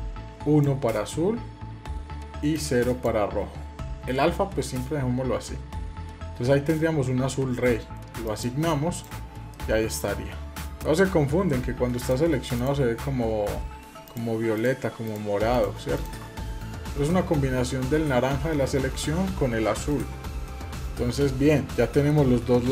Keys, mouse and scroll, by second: 8.0 click, 8.7 click, 9.3-10.7 middle drag, 11.7 click, 12.3 click, 13.8-15.4 shift+drag, 19.6 click, 20.2-21.9 middle drag.